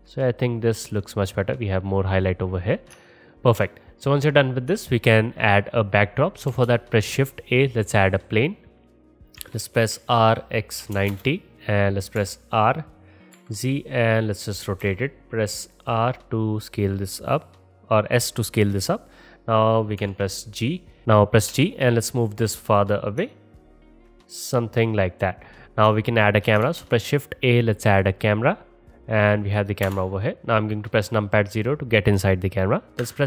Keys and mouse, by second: 6.5 shift+a, 8.2 click, 9.5 r, 12.2 r, 14.7-16.9 middle drag, 14.9 s, 20.0 KP_7, 21.0 ctrl+z, 21.5 g, 23.6-26.7 alt+drag, 26.7 shift+a, 29.9-31.9 middle drag, 29.9 KP_0, 32.7 middle click, 33.0 n.